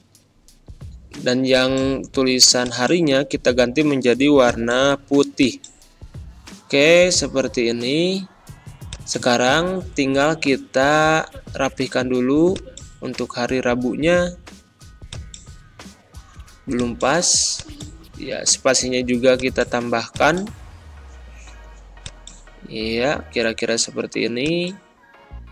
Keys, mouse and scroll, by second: 5.7 click, 5.8 ctrl+scroll up 1, 8.8 click, 9.9 Left, 12.4 click, 14.6 typing, 15.0 click.